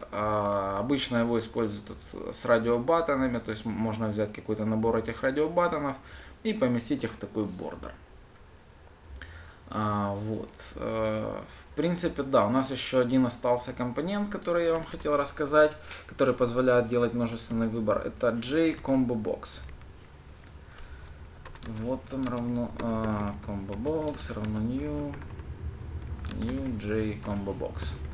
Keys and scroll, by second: 22.2 Return, 26.9 Return.